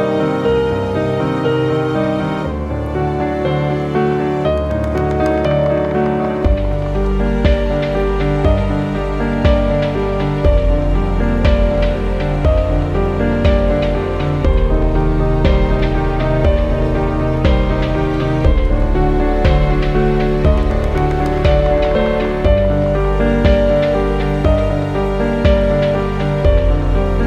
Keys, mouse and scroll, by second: 0.0-8.2 drag, 8.2-20.1 drag, 20.1 scroll down 1, 21.7 click, 22.6 scroll up 1, 23.9 scroll down 1.